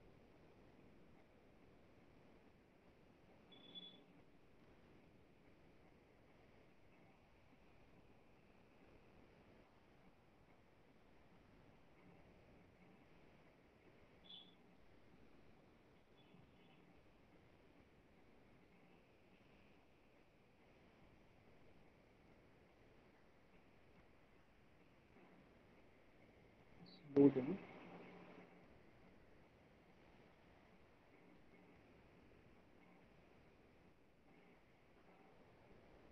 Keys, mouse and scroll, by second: 0.4 click, 0.6 Delete, 2.9 click, 3.1 Delete, 5.5 click, 5.7 Delete, 7.8 click, 8.0 Delete, 8.4 click, 8.6 Delete, 9.1 click, 9.3 Delete, 10.5 click, 10.7 Delete, 12.6 click, 12.7 Delete, 13.1 click, 13.3 Delete, 13.8 middle click, 15.6 middle click, 16.0 middle click, 16.9 Delete, 16.9 click, 17.2 click, 17.4 Delete, 18.9 middle click, 22.6 click, 23.4 Delete, 24.0 click, 24.2 Delete, 26.2 click, 26.4 Delete, 27.3 middle click, 29.3 middle click, 30.3 middle click, 31.9 right click, 32.8 click.